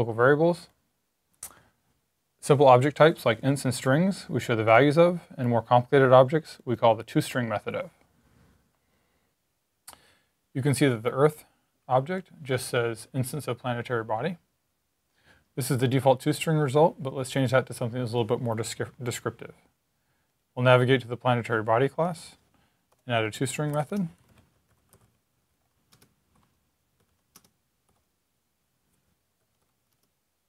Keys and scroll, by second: 22.9-27.7 typing, 29.0-30.4 typing.